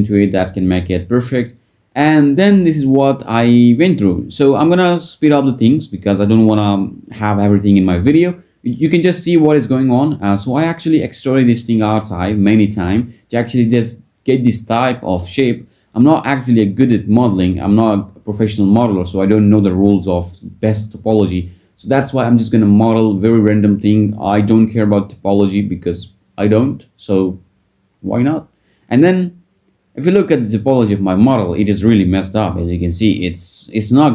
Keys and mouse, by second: 0.1 Tab, 0.7 Tab, 2.1 Tab, 2.7 click, 4.2 shift+click, 4.5 shift+d, 4.7 p, 4.8 Tab, 5.2 ctrl+s, 5.4 Tab, 5.6 a, 6.5 click, 6.9 e, 8.6 click, 8.9 e, 9.2 ctrl+z, 9.4 g, 10.3 click, 11.4 click, 12.1 e, 12.3 click, 12.5 s, 12.8 g, 14.0 g, 14.2 click, 15.5 g, 15.9 click, 16.0 g, 17.5 click, 18.9 click, 19.5-21.9 typing, 23.0 click, 23.7-27.3 typing, 24.3 click, 24.7 click, 25.8 click, 26.4 click, 27.5 click, 28.5 ctrl+shift+b, 29.4 Tab, 30.2 ctrl+z, 30.8 ctrl+r, 32.2 click, 32.5 Tab, 32.8 Tab, 33.4 Tab, 33.6 Tab.